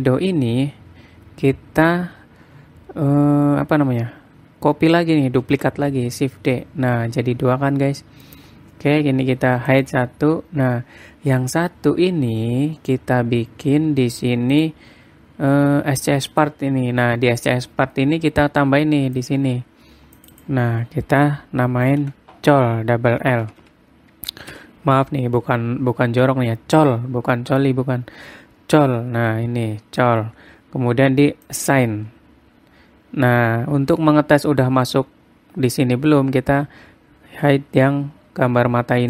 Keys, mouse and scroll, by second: 0.3-1.0 scroll up 2, 1.3-2.2 scroll down 1, 6.0 shift+d, 10.3 click, 11.4-11.8 scroll down 3, 11.8-13.3 scroll up 3, 14.3 scroll down 1, 15.1 click, 15.6-16.9 scroll down 6, 16.9 click, 16.9-18.1 scroll down 5, 19.7 click, 20.7 click, 20.9 click, 24.2 l, 32.0 click.